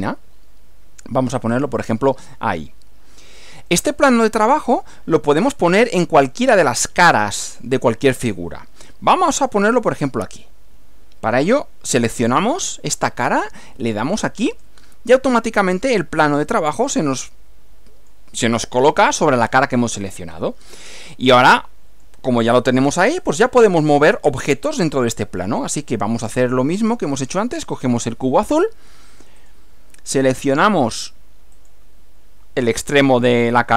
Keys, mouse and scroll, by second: 1.6 click, 2.8 middle click, 3.7-5.5 middle drag, 5.9-7.0 middle drag, 12.4 click, 14.5 click, 16.8-18.3 middle drag, 19.5-20.9 middle drag, 21.4 middle click, 26.8 click, 29.4 click, 31.6 click.